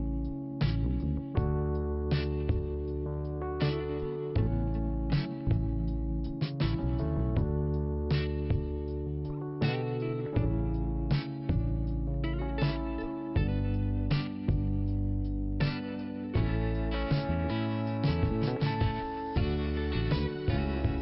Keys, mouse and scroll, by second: 0.9 click, 1.0 click, 1.2 click, 1.3 double click, 1.7 double click, 3.2 click, 4.7 click, 4.7 click, 5.3 click, 6.6 middle click, 8.2 click, 8.3 click, 8.7 click, 10.1 click, 12.2 click, 12.2 click, 13.0 click, 14.2 middle click, 15.7 click, 15.8 click, 16.2 click, 17.5 click, 19.7-20.4 scroll down 1, 20.4 click, 20.8 click.